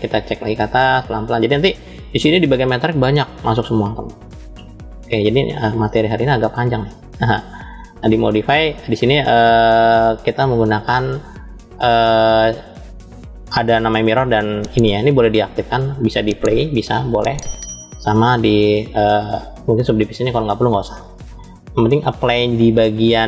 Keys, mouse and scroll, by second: 3.5 click, 5.5-6.9 drag, 7.7 click, 13.0 click, 14.3 click, 15.5-17.3 drag, 18.0-20.0 drag, 21.1-22.8 middle drag.